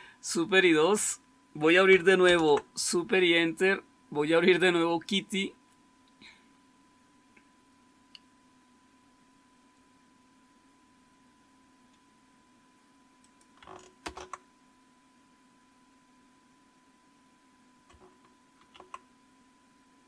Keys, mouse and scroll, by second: 2.1 super+Return, 13.9 super+Return, 13.9 click, 18.5 super+1.